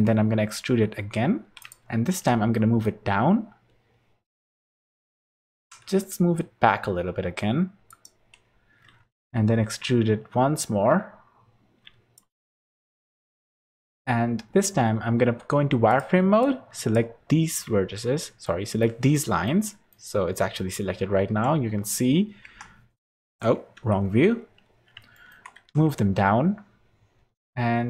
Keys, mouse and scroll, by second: 0.2 e, 2.0 g, 8.9 e, 12.5 shift+middle click, 13.7 2, 14.6 z, 15.8 click, 16.3 click, 18.4 middle click, 19.1 middle click, 19.6 middle click, 19.9-21.2 scroll down 3, 21.2 KP_Decimal, 22.4 KP_3, 23.7 KP_1, 24.3 scroll up 2, 24.9 scroll up 1, 25.1 shift+middle click, 25.5 g.